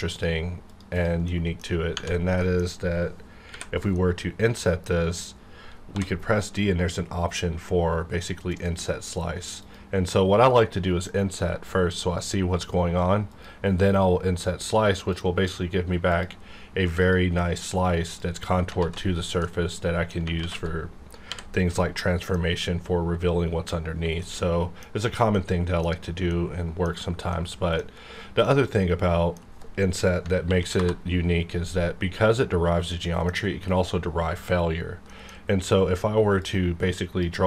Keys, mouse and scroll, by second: 0.9 click, 1.3 middle click, 2.4 middle click, 2.7-3.5 scroll up 1, 3.9-5.9 middle drag, 5.9 d, 8.5 click, 13.3 click, 16.1 click, 18.8 alt+z, 19.4 middle click, 20.4 alt+z, 21.3 h, 21.7-25.3 middle drag, 25.5 scroll down 1, 26.3 middle click, 27.5 scroll down 1, 28.4-30.4 middle drag, 30.4 ctrl+n, 31.2 Return, 32.3-32.9 scroll up 1, 32.9 middle click, 33.4 scroll up 1, 35.1 middle click, 35.4-36.4 scroll down 1, 36.4-37.4 drag.